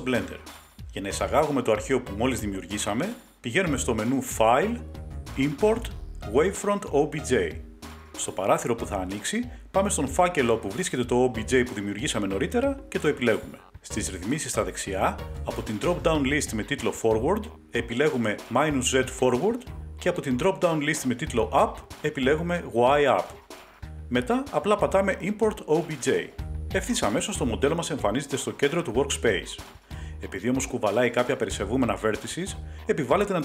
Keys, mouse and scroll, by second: 1.8 click, 2.5 Delete, 4.4 click, 7.7 click, 9.4 click, 11.1 click, 18.7 click, 19.9 click, 21.2 click, 25.0 click, 32.1 middle click, 32.8 click.